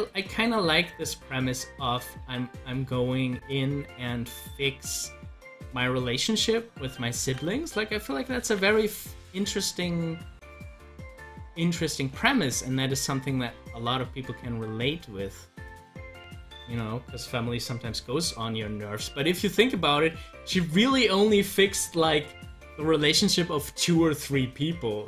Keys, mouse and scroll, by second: 7.2 ctrl+z, 8.4 z, 9.0-12.3 drag, 12.3 ctrl+z, 13.1-17.6 drag, 19.7 click.